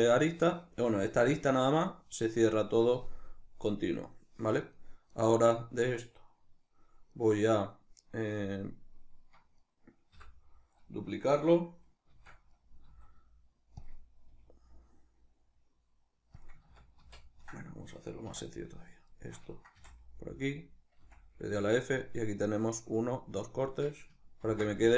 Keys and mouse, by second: 4.8 right click, 5.8 right click, 6.9 right click, 9.4 right click, 9.9 l, 11.8 shift+d, 12.4 right click, 12.6 s, 13.6 click, 14.0 g, 16.2 click, 16.4 ctrl+z, 18.0 2, 18.3 right click, 18.8 shift+right click, 19.5 f, 20.1 right click, 20.7 f, 24.2 ctrl+r.